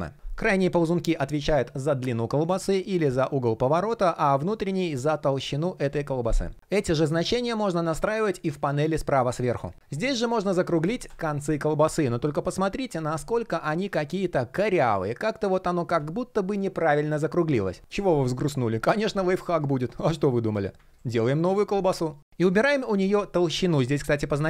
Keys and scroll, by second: 6.3 super+\, 24.3 super+z.